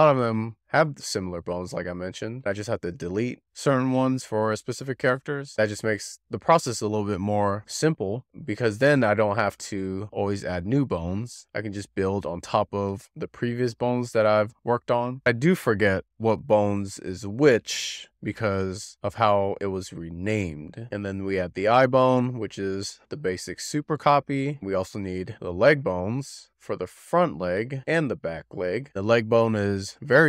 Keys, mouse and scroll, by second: 0.2 click, 1.5 scroll down 2, 2.1 click, 2.2 scroll up 2, 2.5 shift+click, 2.7 shift+click, 2.8 scroll down 1, 3.1 click, 3.4 shift+middle click, 4.0 scroll down 1, 4.4 scroll up 1, 5.5 click, 5.8 click, 6.3 click, 6.6 click, 7.3-7.6 scroll up 3, 7.6 click, 9.3 click, 10.1 shift+s, 10.5 scroll down 2, 11.0 shift+s, 11.2 scroll down 4, 11.5-12.6 middle drag, 12.9-13.6 scroll up 7, 13.0-13.3 shift+middle drag, 13.6-14.3 scroll down 6, 15.1 click, 15.3 scroll up 6, 15.6 Tab, 16.9 click, 17.1 Tab, 17.2 click, 17.3 Tab, 17.4 click, 17.6-18.0 scroll up 6, 18.0 1, 18.2 click, 19.3 shift+s, 19.5-19.9 scroll down 3, 20.0 Tab, 20.2 shift+middle click, 20.5 click, 20.8 click, 20.9 scroll down 1, 21.1 click, 21.3 click, 21.4 shift+middle click, 21.6 click, 21.7 middle click, 21.8 click, 21.9 scroll up 5, 22.0 click, 22.1 middle click, 22.5 click, 22.8 middle click, 23.0 scroll up 7, 23.1 scroll down 5, 23.2 scroll up 1, 23.6 shift+d, 23.7 middle click, 24.2 scroll down 6, 24.3 middle drag, 24.5 click, 24.8-25.2 scroll down 2, 25.0 shift+middle click, 25.2 e, 25.4 click, 26.4 click, 26.7 click, 27.0 scroll up 5, 27.1 scroll down 6, 27.4-27.7 scroll up 3, 27.7 Left, 28.0 scroll down 1, 28.3 Left, 28.4 Left, 28.6 Left, 28.9 Left, 29.1 Left, 29.3 Left, 29.5 click.